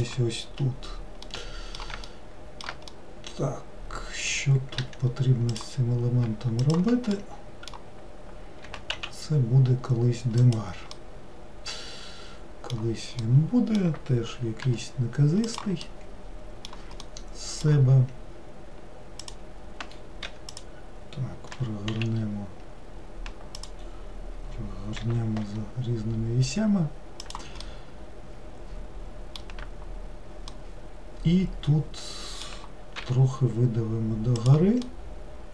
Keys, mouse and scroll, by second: 0.7-1.3 scroll up 1, 1.3-4.9 middle drag, 4.9 1, 5.6 click, 6.7 shift+click, 7.2-8.8 middle drag, 8.8 g, 11.1-14.8 middle drag, 14.8 g, 16.0-19.3 middle drag, 19.3 click, 20.4 3, 20.6 click, 21.7 r, 25.1 r, 27.7-33.1 middle drag, 33.1 e, 35.0-35.5 middle drag.